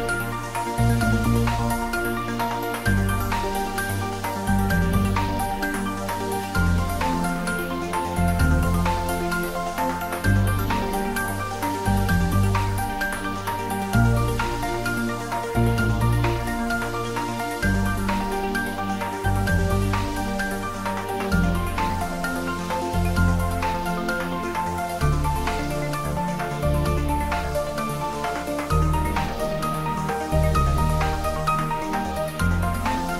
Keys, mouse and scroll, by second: 0.1 click, 1.3-1.6 scroll down 1, 1.6-2.2 middle drag, 3.2 click, 3.7-4.1 scroll up 1, 5.6 h, 7.1 ctrl+z, 8.0 g, 9.0 Down, 11.4 space, 12.5 scroll down 1, 12.9-13.5 middle click, 13.5-14.9 scroll down 1, 14.9 click, 17.2-17.7 middle click, 17.8 click, 21.5 scroll up 1, 23.4 g, 23.8 z, 24.4 Up, 30.3 space, 31.0 scroll up 1, 32.7-33.1 middle click.